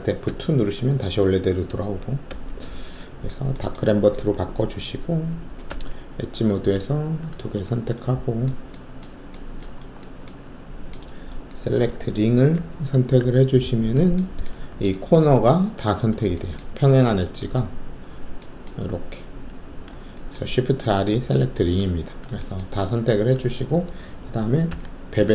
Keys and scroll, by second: 0.2 alt+F2, 5.6 alt+2, 12.5 alt+shift+r, 24.6 alt+shift+b.